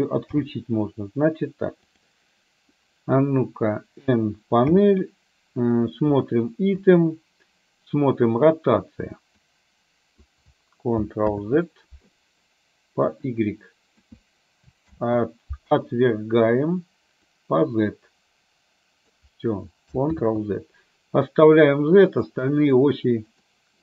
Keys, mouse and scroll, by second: 0.4 n, 2.0 click, 4.8 n, 6.9 click, 9.4-10.4 drag, 11.4 ctrl+z, 13.1-14.1 drag, 15.0 ctrl+z, 17.5-19.2 drag, 20.2 ctrl+z, 23.4 click.